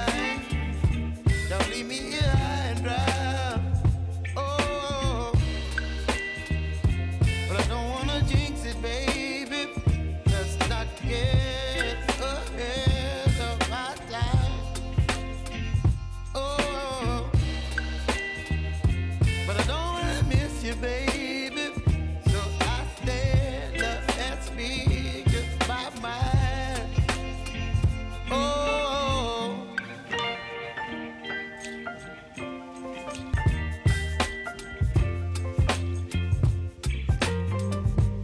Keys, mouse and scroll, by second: 0.3 click, 1.3 s, 2.2 click, 2.5 r, 2.9 click, 4.4-5.8 typing, 7.9 click, 9.2-9.7 typing, 10.8-17.6 drag, 17.6-19.3 scroll up 1, 19.3 click, 21.6 k, 22.3 click, 22.9 ctrl+c, 23.1 click, 23.5 ctrl+v, 24.5 click, 25.5 F9, 25.8 click, 26.2 k, 27.9 click, 29.2 Return, 30.0 click, 30.3 space, 31.5 click, 32.4 j, 34.1 click, 34.6 Return, 36.5 click.